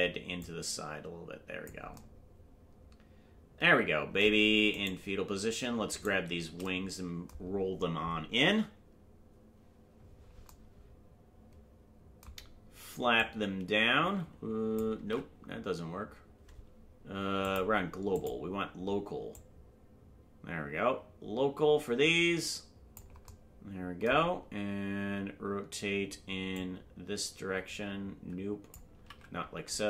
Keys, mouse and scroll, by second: 0.4-1.7 drag, 5.0 right click, 6.2 shift+right click, 13.1-14.8 drag, 15.5 ctrl+z, 17.4-18.5 drag, 19.3-23.0 drag, 26.5-28.7 drag, 29.5 ctrl+z.